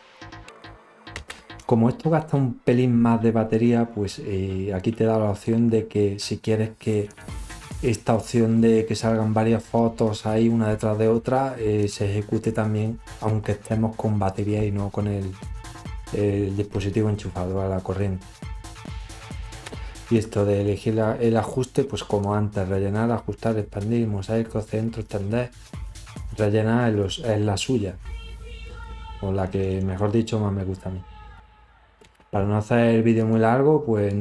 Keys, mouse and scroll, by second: 4.6 click, 14.3 click, 18.1 click, 24.0 click, 24.9 click.